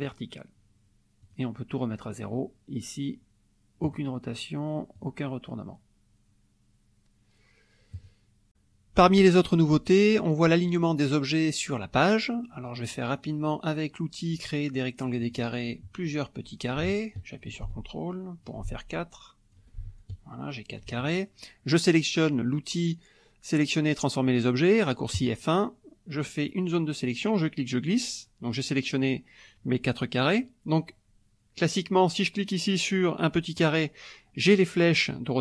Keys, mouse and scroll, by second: 0.1 click, 1.2 click, 3.8 click, 5.0 click, 7.9 click, 12.3 middle click, 12.3-13.0 scroll down 1, 15.2 click, 16.4-17.6 drag, 17.7 ctrl+click, 18.9 ctrl+click, 19.9 ctrl+click, 25.2 click, 26.5-28.1 drag, 33.5 click.